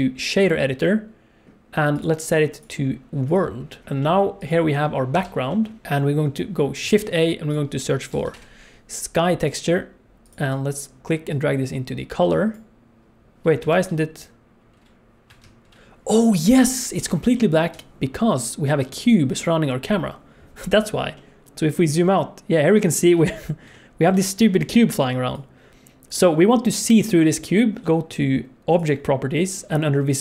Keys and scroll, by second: 5.1 n, 6.8 shift+a, 13.8 alt+shift+z, 15.4 alt+shift+z.